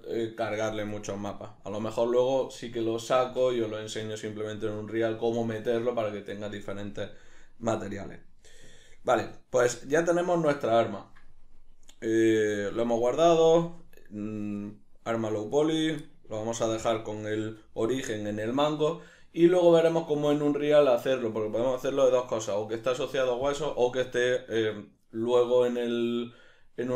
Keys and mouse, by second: 15.9 right drag, 16.4-26.9 middle drag.